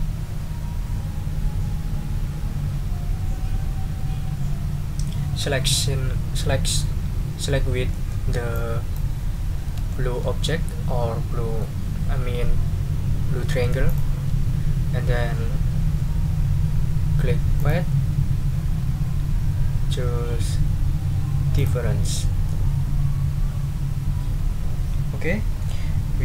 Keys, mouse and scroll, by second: 7.9 middle click, 8.5 click, 9.6 ctrl+z, 9.9 ctrl+click, 11.7-12.8 ctrl+middle drag, 12.9 ctrl+click, 13.9 ctrl+shift+click, 17.6 click, 21.5 click, 22.1 click.